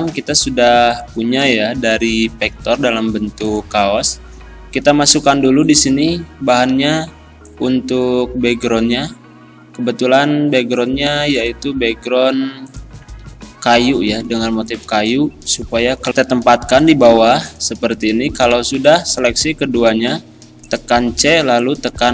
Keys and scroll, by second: 16.1 ctrl+End, 19.5 c, 20.8 e, 21.3 z.